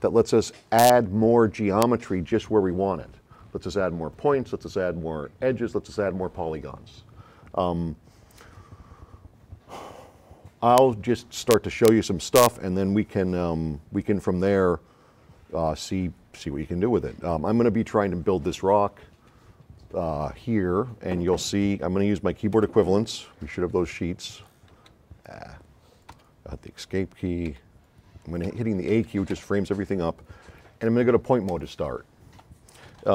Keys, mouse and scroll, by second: 23.7 s, 24.8 s, 25.4 click, 26.3 Escape, 27.6 a, 28.7 a, 29.4 a, 31.5 click.